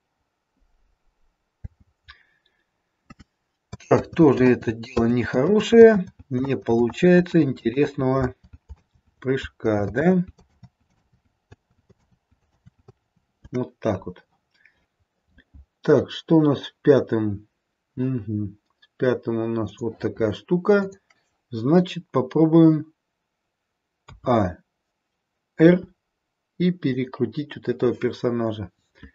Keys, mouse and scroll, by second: 1.5 space, 3.9 ctrl+z, 4.4 ctrl+z, 4.9 ctrl+z, 5.5 ctrl+z, 6.0 ctrl+z, 6.4 ctrl+z, 6.9 ctrl+z, 7.4 ctrl+z, 7.7 ctrl+z, 8.2 ctrl+z, 8.7 ctrl+z, 9.4 ctrl+z, 9.9 ctrl+z, 10.4 ctrl+z, 10.9 ctrl+z, 11.8 ctrl+z, 11.9 ctrl+z, 12.4 ctrl+z, 15.8 click, 19.6 click, 20.7 click, 24.0 a, 25.6 r.